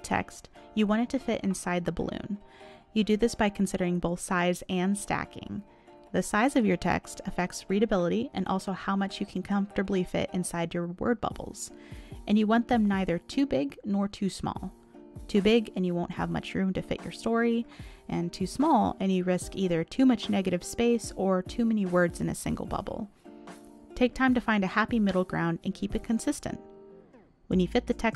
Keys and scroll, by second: 13.2 ctrl+z, 14.6 ctrl+z, 16.6 ctrl+z, 19.4 ctrl+z, 20.8 ctrl+z, 21.4 ctrl+z, 22.5 ctrl+z.